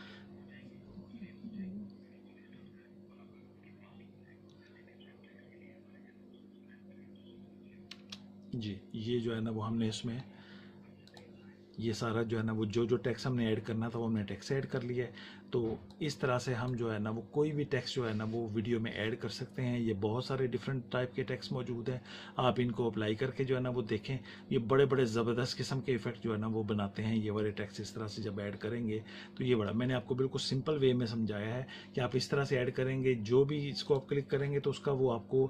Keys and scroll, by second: 7.9 space.